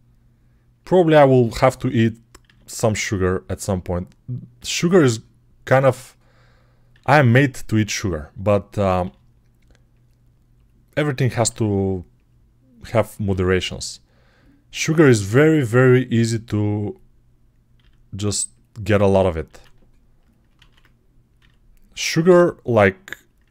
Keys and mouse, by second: 1.4 click, 2.3 e, 4.4 g, 6.7-16.7 middle drag, 6.7 e, 8.9 g, 10.4 click, 11.3 e, 12.7 click, 13.1 g, 15.6 g, 16.7 click, 16.8 middle click, 17.6 e, 19.4 e, 20.4 ctrl+z, 21.2 s, 21.4-23.5 middle drag, 22.2 g.